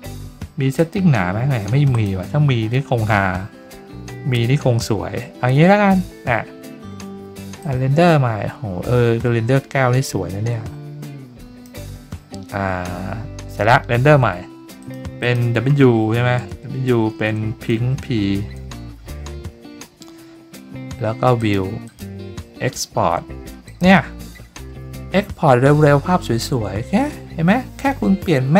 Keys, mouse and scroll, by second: 0.7 click, 1.9 click, 7.6-11.6 drag, 14.8 click, 15.2 click, 21.3 click, 21.8 click, 23.6 click.